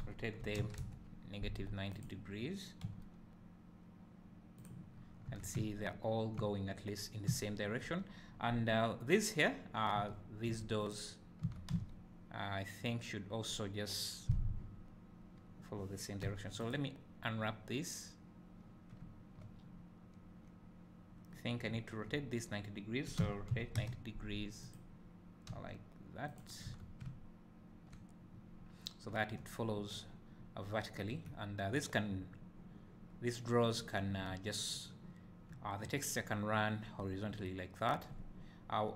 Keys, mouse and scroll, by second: 0.1 r, 2.1 click, 3.0 g, 4.8 click, 5.0 scroll down 1, 5.4 Tab, 5.7 `, 7.0-7.4 scroll up 2, 7.4 `, 8.1-8.9 scroll down 1, 10.0 Tab, 11.0 click, 11.6 Tab, 11.8 a, 17.1 u, 21.9 middle click, 23.3 r, 24.8 click, 25.6 g, 26.4 click, 26.8 Tab, 27.1 `, 27.5 middle click, 29.1 middle drag, 35.7-37.3 middle drag.